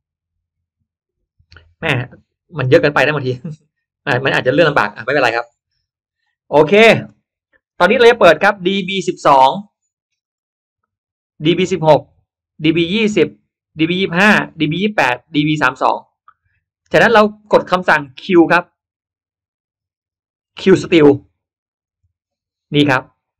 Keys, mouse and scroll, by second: 2.9 click, 5.1-6.1 drag, 6.5 click, 10.1 click, 11.7 click, 13.0 click, 14.1 click, 14.9 click, 15.9 click, 21.7 click, 22.7-23.3 scroll up 1, 22.9 middle click.